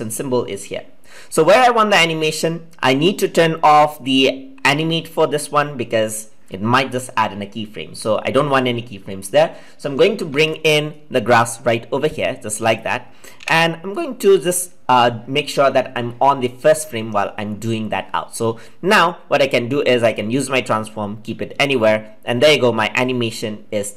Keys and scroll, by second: 13.3 ctrl+z.